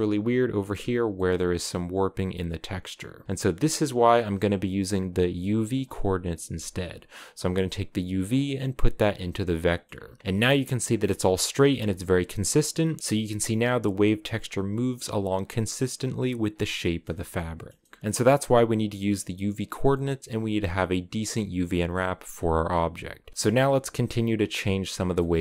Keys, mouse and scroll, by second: 0.6 scroll down 1, 0.9-2.9 shift+middle drag, 4.6-8.2 middle drag, 8.2 click, 8.3 middle click, 8.8-9.3 scroll down 4, 9.3 middle click, 9.7-10.3 scroll up 5, 11.2 shift+middle click, 11.5 scroll down 2, 11.7-12.8 middle drag, 12.8 scroll up 2, 13.0-16.2 middle drag, 16.2-16.6 scroll down 5, 16.6-18.1 middle drag, 18.1 click, 19.6-21.7 middle drag, 21.7-23.3 scroll up 2, 23.3 KP_0, 24.2-25.4 drag.